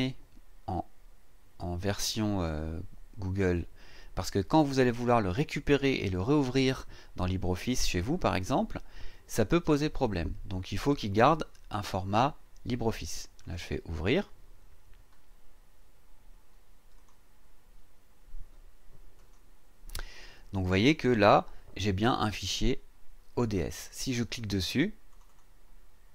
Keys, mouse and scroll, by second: 13.4 click, 16.9 click, 19.1 click, 23.9 click, 25.1 click.